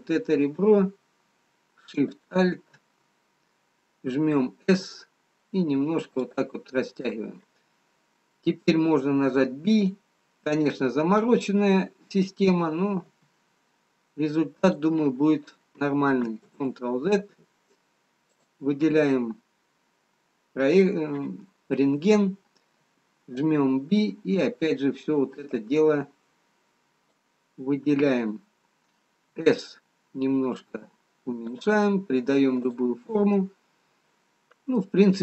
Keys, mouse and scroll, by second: 4.0 alt+shift+click, 4.7 s, 8.0 scroll down 1, 9.4 b, 13.1 s, 19.4 click, 22.9 b, 25.4 b, 29.4 s, 33.0 click, 33.5 middle click.